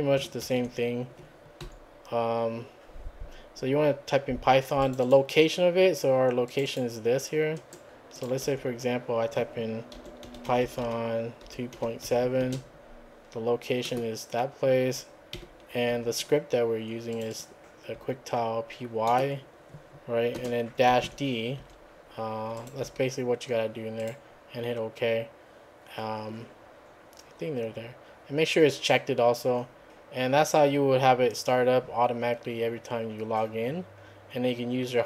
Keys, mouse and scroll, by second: 0.4 ctrl+c, 1.6 Up, 4.8 click, 6.5 click, 7.6 right click, 8.1 click, 8.4 `, 9.7-12.4 typing, 13.9 click, 15.3 /, 15.9 `, 17.2 click, 17.9 `, 19.1 middle click, 20.4-21.6 typing, 22.6 click, 22.9 `, 24.0 click, 25.9 scroll up 1, 26.1-27.1 scroll down 5, 27.5 scroll down 2.